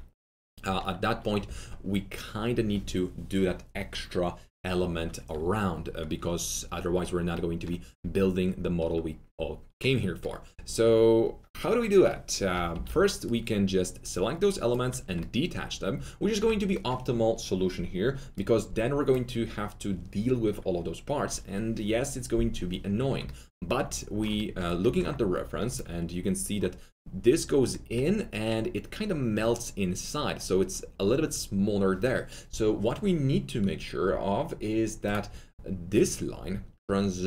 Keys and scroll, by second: 12.7 alt+4, 15.1 alt+4.